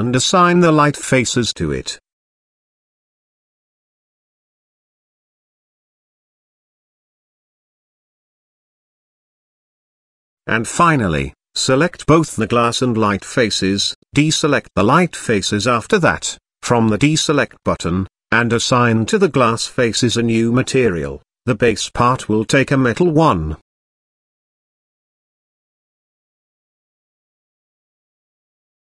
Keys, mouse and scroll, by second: 2.0 Tab, 3.0 click, 4.2 Tab, 7.4 Tab, 8.6 KP_1, 10.5-11.8 drag, 11.8 click, 12.6-13.7 drag, 15.5 click, 16.8 click, 18.6 click, 19.6-21.8 drag, 21.1 s, 23.1 click, 25.7 click, 26.5 click, 28.1-28.8 drag.